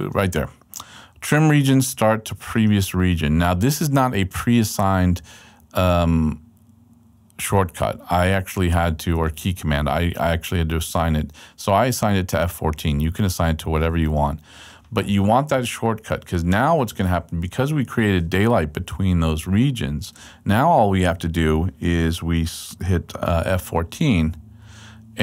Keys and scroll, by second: 18.6 super+Right, 24.3 F14.